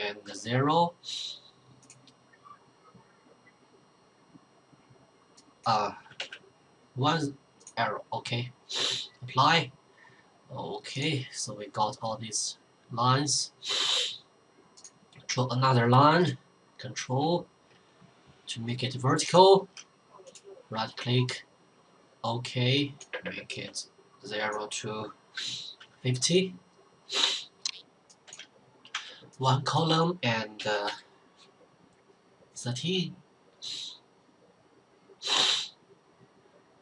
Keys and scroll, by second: 0.1 0, 6.1 1, 23.6 typing, 25.0-25.7 typing, 27.9-28.8 typing, 30.2-31.3 typing.